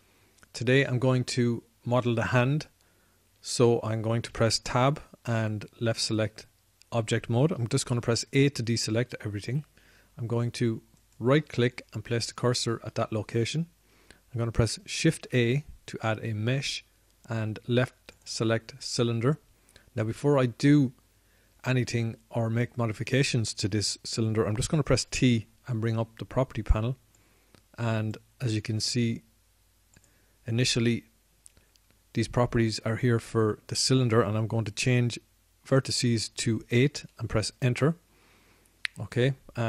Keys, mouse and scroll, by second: 5.6 Tab, 6.9 Tab, 9.4 a, 14.0 a, 16.5 shift+a, 26.3 t, 28.3-29.6 drag.